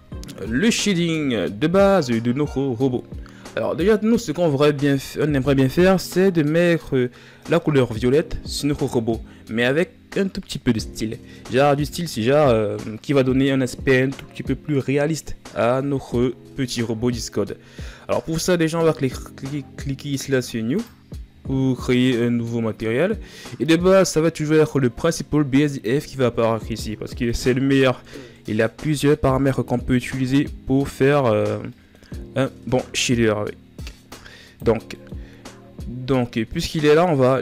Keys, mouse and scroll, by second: 0.6-1.4 scroll down 6, 1.4 ctrl+scroll up 2, 20.6-21.9 drag, 21.9-23.7 middle drag, 23.7-27.7 drag, 29.8-33.9 middle drag, 33.9 click, 34.9-37.4 middle drag.